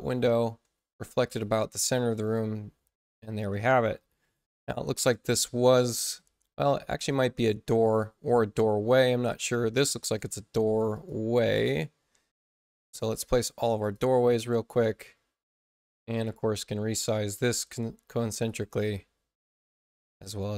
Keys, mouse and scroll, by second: 0.0 ctrl+alt+c, 1.2 click, 6.0 space, 7.1 d, 8.2 click, 10.9 click, 12.9 click, 13.7 click, 14.3 space, 14.7 click, 16.0 c, 16.3-18.4 drag, 20.2 click.